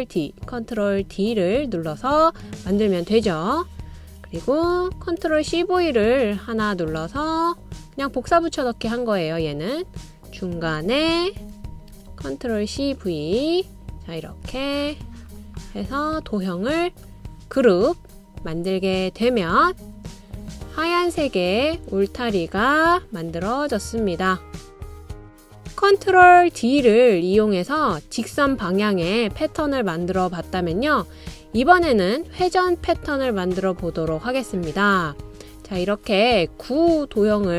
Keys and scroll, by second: 0.3 super+d, 0.8 super+d, 1.4 ctrl+d, 5.5 super+c, 6.0 super+v, 12.3 super+c, 12.7 super+v, 23.8 d.